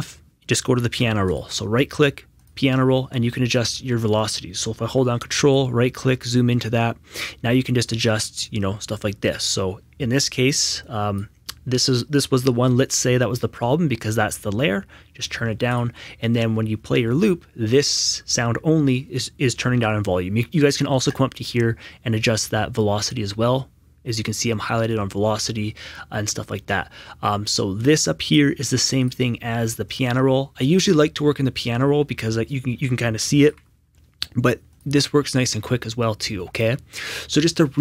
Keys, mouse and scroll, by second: 1.2 q, 2.3 right click, 2.4 click, 5.2 click, 5.5 ctrl+right click, 7.8 click, 10.8 click, 14.1 click, 15.7 right click, 15.8 Escape, 21.1 Escape, 21.1 click, 28.2 click, 29.9 click, 33.4 click, 33.4 right click, 33.4 Escape, 34.7 click.